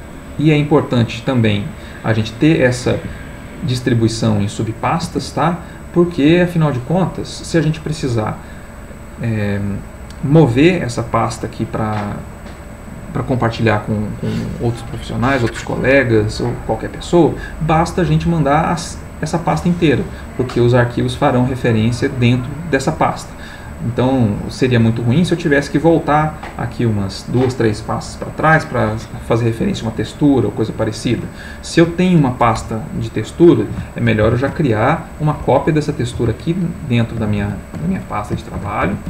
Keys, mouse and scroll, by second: 3.1 alt+Tab, 5.0 alt+Tab, 18.7 click, 30.5 click, 34.2 ctrl+shift+t, 36.2 click, 37.4 ctrl+shift+n, 38.6-39.0 typing.